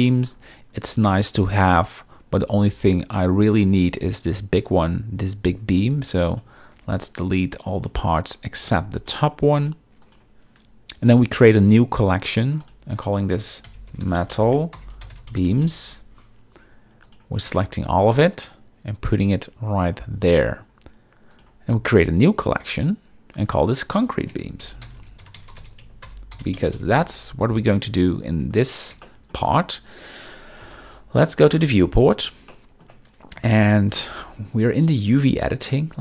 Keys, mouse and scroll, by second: 1.1-1.4 shift+middle drag, 5.7 b, 6.0 click, 6.3 click, 6.7 b, 6.9 click, 8.6 x, 9.6 click, 10.0 click, 11.1-11.7 right drag, 12.3 click, 12.6 click, 17.0 click, 18.3 shift+click, 18.9-19.9 drag, 21.3 click, 22.3 right click, 23.3 click, 24.0 shift+click, 29.0 shift+middle click, 30.6 KP_0, 32.5-32.8 shift+middle drag.